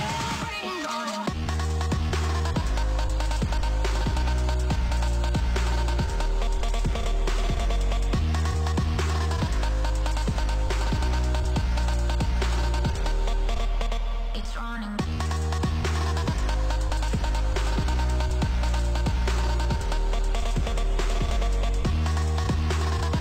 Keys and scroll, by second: 3.7 t, 10.3 0, 11.2 space, 16.8 ctrl+s.